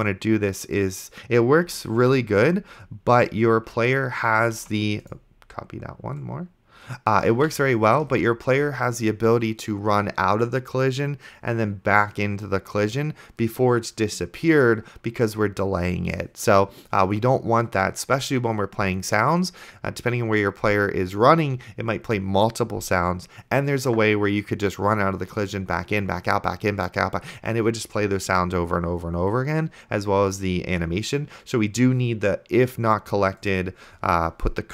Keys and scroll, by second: 2.3 ctrl+x, 4.9 ctrl+z, 7.6 ctrl+x, 8.6 ctrl+v.